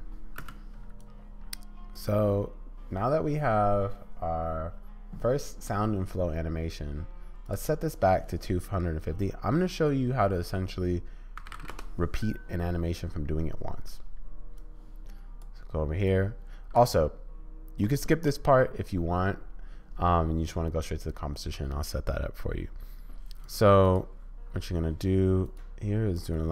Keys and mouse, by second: 0.4 space, 1.0 click, 7.4-12.3 drag, 14.7 click, 16.1 click, 23.5 click, 25.4 right click.